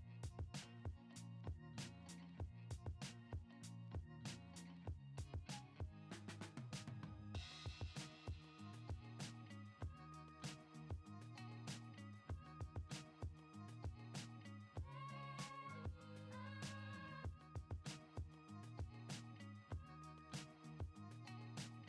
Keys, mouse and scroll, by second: 2.2 middle click, 2.3 click, 3.8 middle click, 5.6 shift+a, 12.1-13.2 drag, 13.9-14.2 middle drag, 14.3 click, 15.0 shift+a.